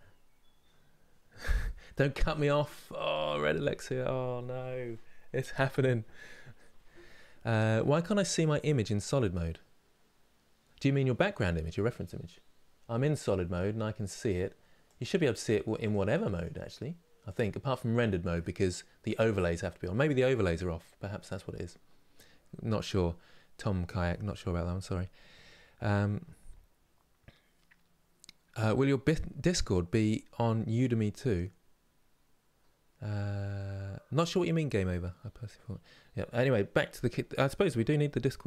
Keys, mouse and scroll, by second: 12.7 click, 14.5 click, 15.5 click, 16.1 click, 17.0 click, 21.2 click.